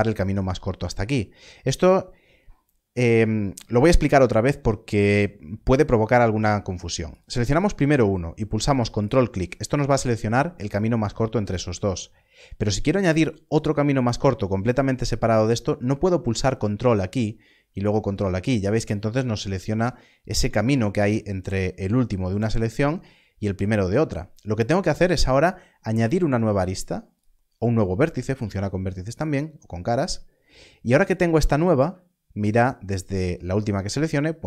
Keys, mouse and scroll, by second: 7.1 ctrl+click, 16.4 ctrl+click, 17.8 ctrl+click, 19.9 ctrl+z, 20.3 ctrl+z, 27.1 shift+click.